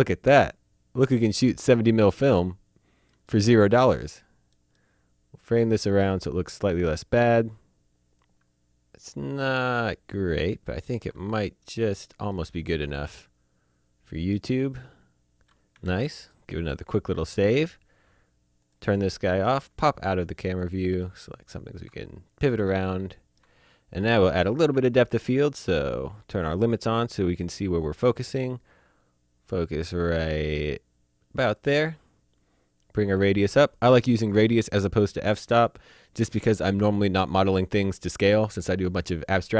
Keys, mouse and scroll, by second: 2.3 middle click, 3.5 middle click, 5.0 scroll up 1, 5.0 middle click, 6.1 shift+middle click, 8.1 shift+Num_Lock, 8.2-9.7 shift+scroll down 2, 9.7-10.0 scroll up 1, 10.0 scroll down 1, 10.4 shift+middle click, 11.3 middle click, 12.3 shift+middle click, 15.7 ctrl+Num_Lock, 15.8 ctrl+s, 16.2 click, 18.6 click, 19.0 middle click, 19.9 shift+click, 20.5 click, 21.0 middle click, 21.7-22.5 shift+scroll down 1, 22.6 shift+middle click, 24.1 click, 26.5 click, 33.0 click, 33.7 click.